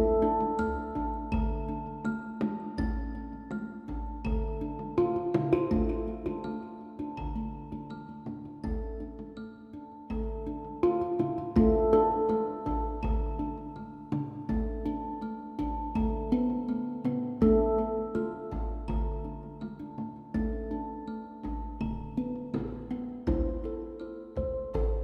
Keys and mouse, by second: 1.7 Left, 16.4 BackSpace.